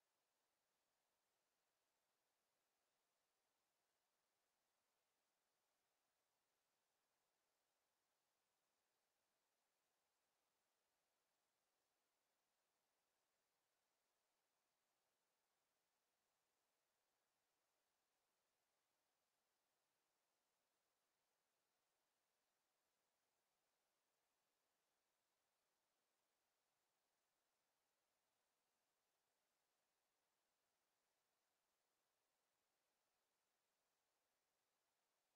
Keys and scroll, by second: 5.0 r, 11.4 w, 13.4 space, 13.7 w, 14.9 a, 16.5 w, 17.1 space, 17.6 w, 18.8 space, 19.1 w, 21.7 space, 22.6 w, 23.0 space, 23.2 w, 25.7 d, 26.3 space, 27.8 a, 29.3 w, 30.5 space, 32.4 w, 32.8 Escape.